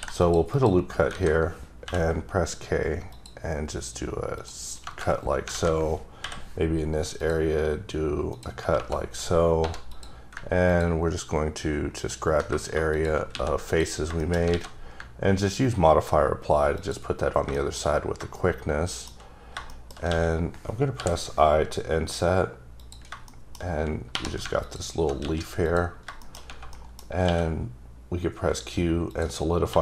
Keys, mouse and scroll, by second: 0.2 click, 0.5 click, 1.1 alt+a, 1.8 k, 3.1 click, 4.4 click, 4.8 KP_Enter, 5.5 alt+a, 6.2 k, 7.1 click, 8.3 click, 8.7 KP_Enter, 9.6 3, 9.9 click, 11.9 ctrl+double click, 12.9 shift+click, 13.3 x, 13.6 click, 14.1 shift+scroll up 1, 14.2 shift+middle click, 14.5 alt+x, 15.2-16.1 ctrl+scroll down 2, 16.7 click, 17.5 shift+middle click, 17.9 scroll up 2, 18.3 shift+middle click, 19.4 scroll down 2, 19.6 shift+middle click, 20.1-20.9 typing, 22.7 click, 23.2 shift+middle click, 23.6 shift+scroll up 2, 24.1 3, 24.6 alt+click, 25.2 x, 25.6 click, 25.9 scroll down 3, 26.1 shift+scroll up 1, 26.2 shift+middle click, 26.7 middle click, 27.2 q, 29.1 click, 29.7 2.